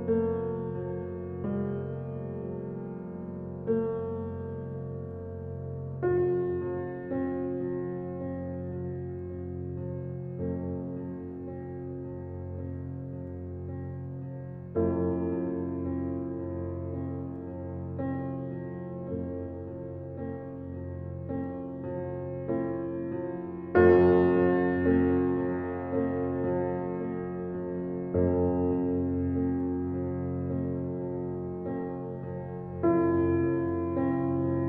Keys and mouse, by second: 1.1 click, 2.2-3.2 drag, 3.5 click, 5.1-5.8 typing, 5.7 click, 6.9-7.3 typing, 11.8 click, 13.4 click, 15.1-15.4 typing, 16.5-18.6 drag, 18.7 click, 19.5 typing, 20.1 Escape, 21.1-21.5 typing, 22.1 Escape, 23.0 s, 23.7 Page_Down, 24.2 Page_Down, 25.8 y, 27.3-28.8 drag, 28.8-29.4 typing, 30.6 click, 31.4 click, 31.7-32.7 typing, 33.4 click, 34.6 typing.